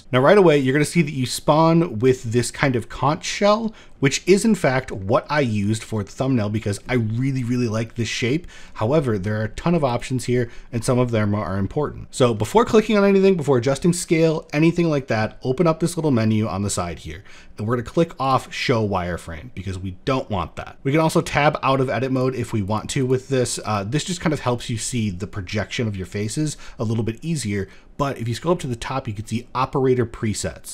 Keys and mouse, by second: 0.1 shift+middle click, 1.2 middle click, 1.9 middle click, 2.8 shift+middle click, 3.1 middle click, 3.6 shift+middle click, 4.0 middle click, 4.3 shift+middle click, 4.8 middle click, 5.4 middle click, 6.2 middle click, 7.4 middle click, 9.5 click, 17.8 click, 21.7 click, 23.2 click, 23.6 click.